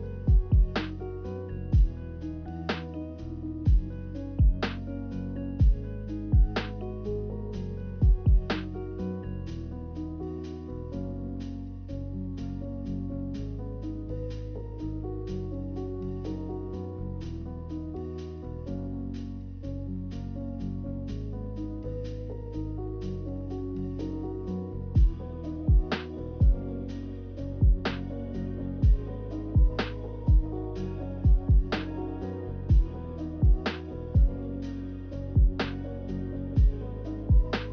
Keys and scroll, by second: 0.0-0.8 typing, 12.6 a, 15.1 a, 21.9 z, 23.3 b, 25.0 a, 31.4 a, 32.0 a.